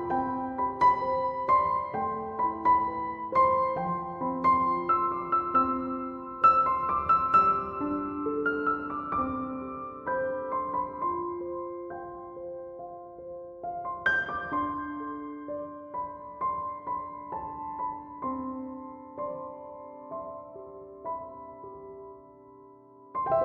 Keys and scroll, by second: 11.4 f, 16.2 2, 16.6 0, 16.9 Return.